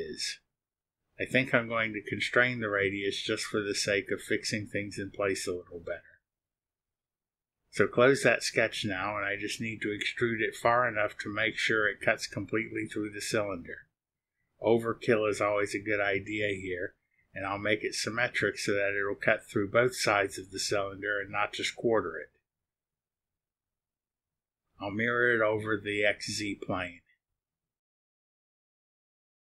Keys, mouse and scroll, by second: 0.2 click, 2.0 click, 4.9 click, 7.4 click, 8.2 click, 11.5 click, 14.3 KP_2, 14.4 KP_0, 16.8 click, 20.5 click, 21.9-23.4 drag, 22.0-23.4 right drag, 25.5 click, 27.6 click, 28.6 click.